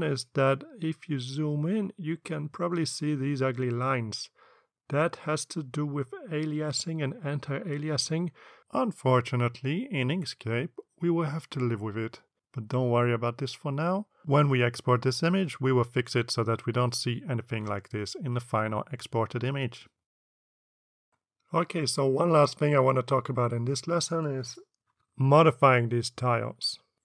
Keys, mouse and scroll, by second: 4.6 click, 5.4 click, 5.8 click, 6.3 click.